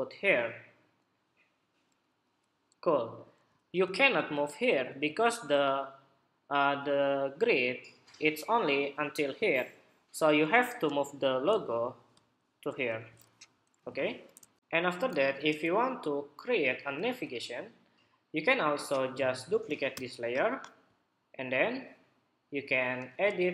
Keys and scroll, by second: 15.3 super+-, 16.8 super+=, 19.6 super+j.